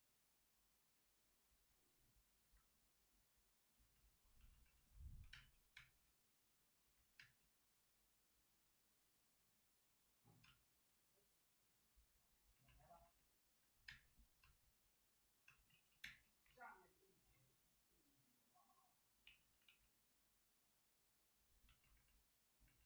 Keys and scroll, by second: 5.2 2, 5.3 space, 5.7 space, 7.0 ctrl+z, 7.1 space, 10.4 space, 13.8 space, 14.4 space, 15.5 space, 15.6 ctrl+z, 15.8 ctrl+z, 16.4 ctrl+z, 19.2 ctrl+z.